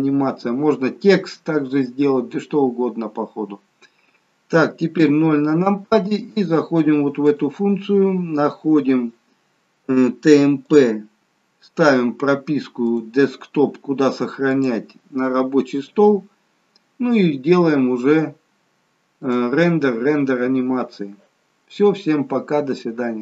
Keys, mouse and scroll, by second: 5.0 KP_0, 7.4 click, 10.7 click, 19.2 click.